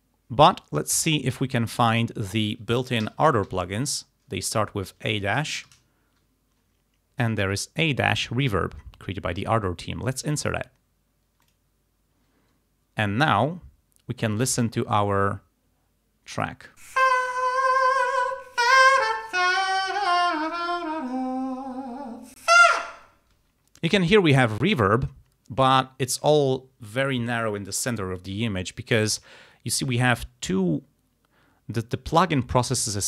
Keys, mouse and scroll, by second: 2.0 click, 3.1 a, 3.6 -, 5.7 shift+r, 10.1 click, 11.5 click, 16.4 click, 16.9 space, 23.4 space.